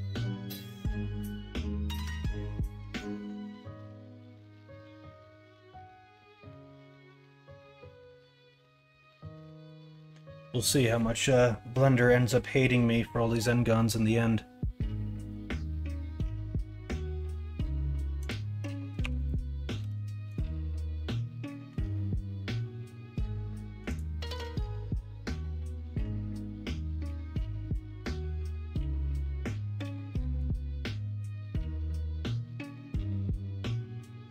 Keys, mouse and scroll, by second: 19.0 3, 19.7 x.